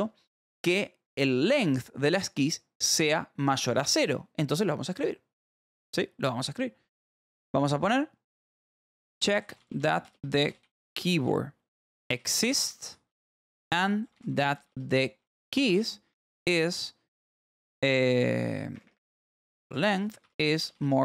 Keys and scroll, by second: 8.7-16.6 typing, 18.7-21.0 typing.